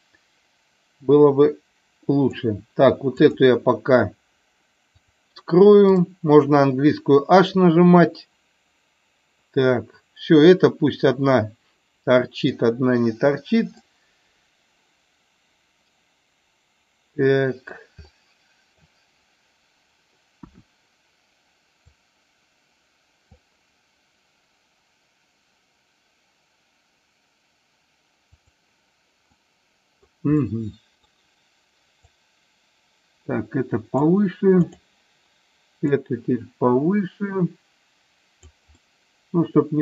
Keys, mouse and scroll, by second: 3.2 click, 4.9 click, 5.9 click, 6.5-12.5 middle drag, 13.7-17.7 middle drag, 18.0-18.9 middle drag, 20.4 KP_1, 22.0-23.4 drag, 28.2 click, 29.4-30.0 middle drag, 30.4-31.1 middle drag, 32.0-34.0 drag, 34.7 click, 36.0-38.5 drag, 38.7-39.8 middle drag.